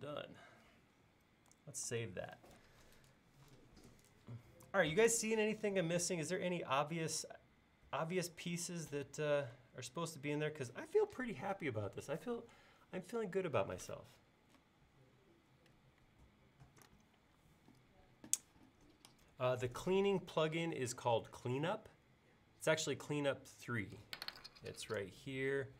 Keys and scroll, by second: 1.9 super+s.